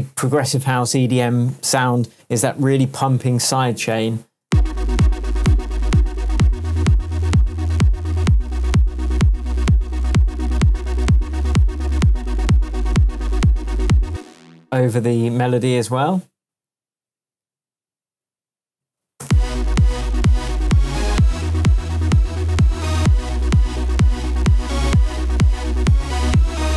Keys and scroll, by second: 4.4 space, 14.0 space, 14.7 super+c, 17.4 super+v, 19.2 super+space.